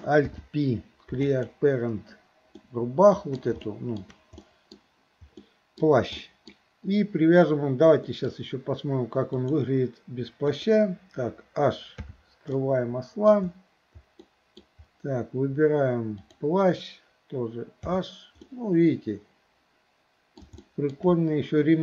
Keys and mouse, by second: 0.2 alt+p, 2.6-3.4 shift+middle drag, 3.6-4.0 shift+middle drag, 4.4-4.8 middle drag, 5.5 middle click, 6.2 middle click, 8.1 middle click, 9.3 click, 10.6 click, 12.1 h, 12.6-13.4 middle drag, 14.3 middle drag, 16.2 click, 17.9 h, 18.5-20.5 middle drag, 20.6-21.0 shift+middle drag.